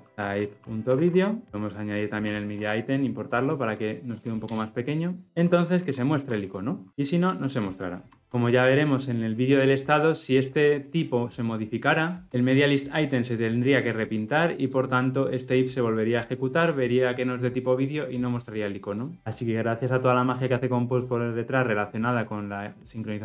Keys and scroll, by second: 1.4 Return, 3.1 alt+Return.